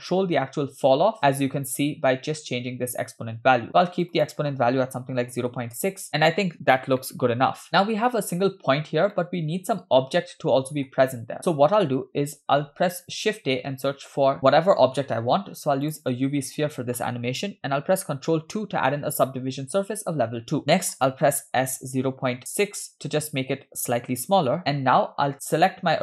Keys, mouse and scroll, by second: 7.1 shift+middle click, 7.7 scroll down 2, 9.2-11.0 middle drag, 13.1 shift+a, 18.3 ctrl+2, 19.7-20.6 scroll up 3, 21.5 s, 25.5 click.